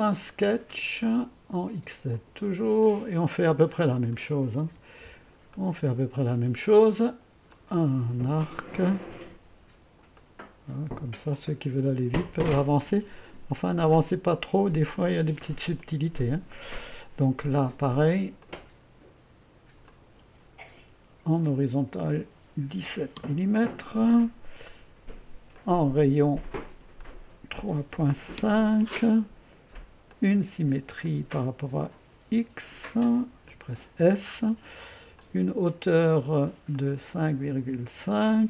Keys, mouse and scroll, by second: 0.1-3.4 drag, 3.8-4.7 scroll up 1, 4.7 Return, 5.6-6.1 scroll up 1, 6.1-8.5 drag, 10.1-11.2 drag, 14.4 click, 15.8 click, 16.6 middle click, 18.4 click, 19.9-22.7 drag, 22.7 KP_1, 22.9 KP_7, 23.2 Return, 25.5-27.7 drag, 27.7 KP_3, 28.1 KP_5, 28.4 Return, 30.1-31.2 drag, 33.5 s.